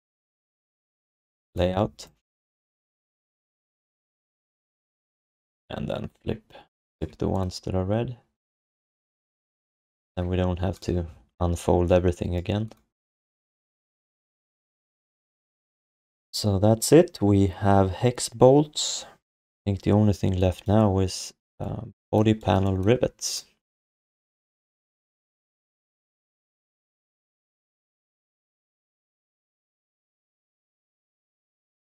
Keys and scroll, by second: 15.8 ctrl+s, 24.5 ctrl+s, 25.0 1.